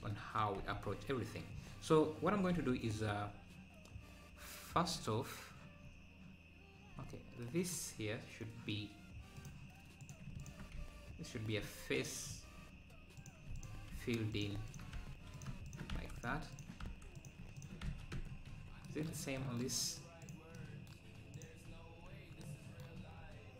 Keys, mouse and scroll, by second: 1.6-2.2 scroll up 1, 2.2-2.6 scroll up 2, 7.0-7.3 scroll up 5, 9.3 click, 10.7 f, 12.1 click, 13.3 click, 13.7 shift+click, 14.0 f, 14.4 click, 14.8 shift+click, 15.1 f, 15.4 click, 15.8 shift+click, 16.0 f, 16.3 click, 16.6 shift+click, 16.9 f, 17.3 click, 17.6 shift+click, 17.9 f, 18.1 Tab, 18.3 scroll down 7, 19.7-20.3 scroll down 1, 20.3 click, 21.4 click, 22.1 scroll up 4, 23.0 scroll up 2.